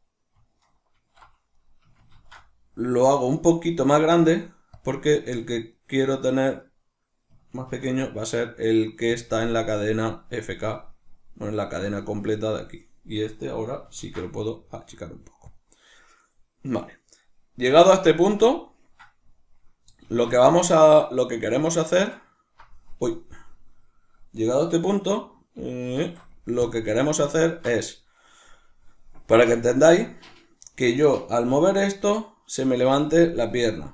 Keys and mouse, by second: 1.0 alt+s, 1.7 right click, 2.2 ctrl+alt+s, 4.9 click, 5.2 right click, 5.6 right click, 5.8 right click, 6.0 right click, 6.2 right click, 6.6 right click, 7.8 ctrl+alt+s, 9.2 click, 12.8 right click, 15.6 click, 18.1-26.0 shift+middle drag, 20.0 alt+o, 26.0 alt+o, 27.0-30.6 shift+middle drag, 30.0 Tab, 30.6 right click, 31.6 g, 33.0 right click.